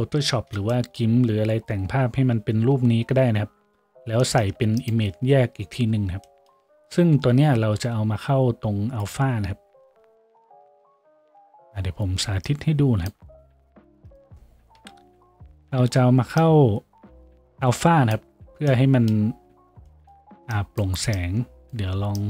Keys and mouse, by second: 0.5-14.9 shift+drag, 14.9 Delete, 14.9-22.2 middle drag.